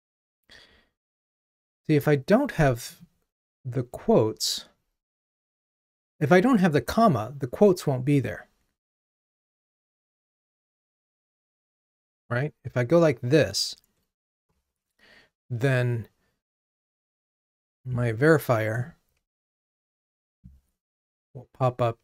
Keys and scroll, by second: 10.6 super+z, 12.1 super+/, 14.5 ctrl+r.